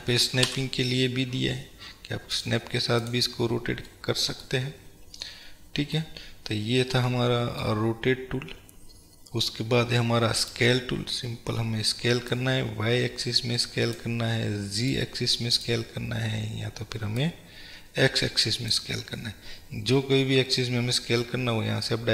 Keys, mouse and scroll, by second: 2.5 drag, 3.1 click, 4.0-10.5 middle drag, 4.8 scroll down 1, 6.3-7.1 scroll up 2, 10.5 click, 12.4-19.4 drag, 19.4-22.1 middle drag.